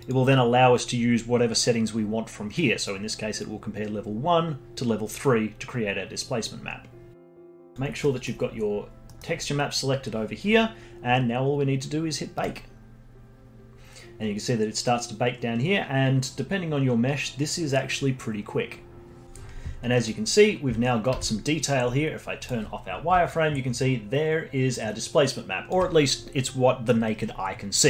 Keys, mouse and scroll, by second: 0.0 click, 7.1 click, 7.7 click, 8.0 middle click, 8.7-9.0 scroll down 2, 9.0-12.2 middle drag, 12.3-15.5 drag, 19.9 middle click, 21.1 z, 23.2-26.3 alt+drag.